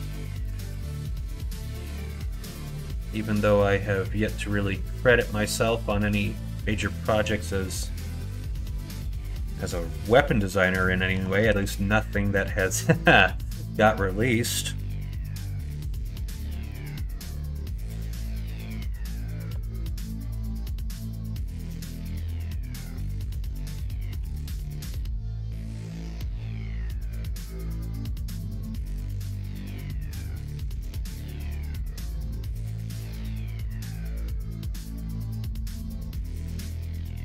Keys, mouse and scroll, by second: 0.6 ctrl+z, 1.8 s, 4.2-6.2 middle drag, 4.4-6.1 right drag, 9.2 scroll up 1, 9.3 middle click, 9.3 right click, 10.3 scroll up 1, 10.3 middle click, 10.3 right click, 10.5 scroll down 1, 10.5 right click, 11.1 KP_1, 11.4 KP_3, 15.1 shift+middle click, 15.3 shift+right click, 16.6 alt+click, 17.6 s, 19.8 alt+click, 21.3 g, 24.2 r, 25.8 s, 28.3 alt+click, 29.4 s, 31.3 ctrl+z, 32.4 s, 35.2 ctrl+z, 36.5 s.